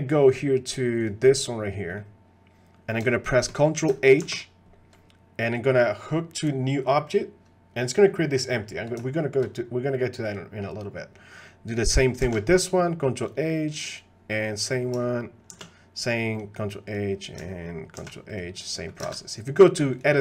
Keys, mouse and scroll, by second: 0.2 middle click, 1.0 click, 1.3 middle click, 3.3 shift+click, 4.2 ctrl+h, 7.9 middle click, 9.2 shift+click, 10.3 click, 12.2 ctrl+h, 15.5 ctrl+h, 16.9 click, 18.0 ctrl+h, 18.8 click, 19.1 ctrl+Tab, 19.9 click.